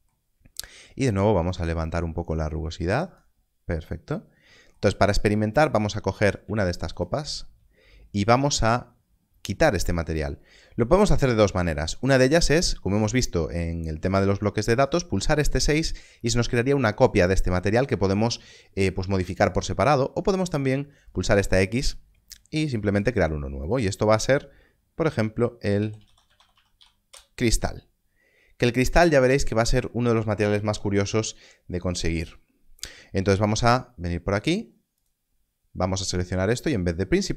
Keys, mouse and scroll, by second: 1.4 click, 5.6 click, 6.6 shift+click, 21.0 click, 25.7-27.0 typing, 27.1 Return, 34.9 click.